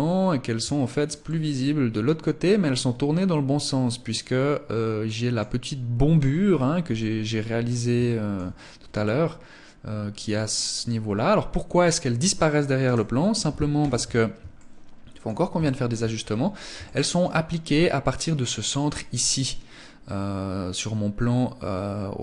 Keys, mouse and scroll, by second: 0.1 shift+middle click, 0.6 middle click, 5.7-6.0 scroll down 5, 6.3 shift+middle click, 7.4 shift+middle click, 9.4 scroll up 2, 12.1 right click, 13.1 KP_1, 13.8 shift+middle click, 14.8 shift+middle click, 15.4 scroll up 1, 16.1 shift+middle click, 16.1-16.4 scroll up 3, 18.4 scroll down 1, 20.2 scroll down 2.